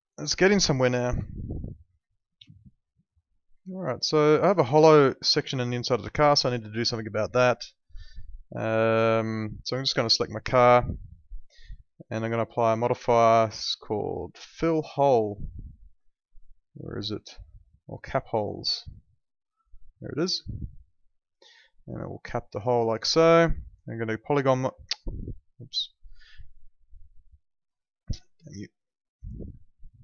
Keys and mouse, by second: 1.2 alt+middle click, 2.5 alt+middle click, 6.3 alt+middle click, 7.2 alt+middle click, 8.1 alt+middle click, 8.9 alt+middle click, 10.3 click, 17.3 click, 21.6 alt+middle click, 23.7 click.